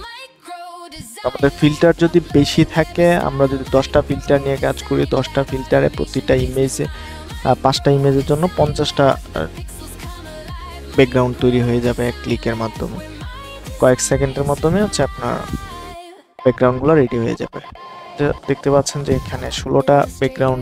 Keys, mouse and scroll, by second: 9.6-20.0 drag.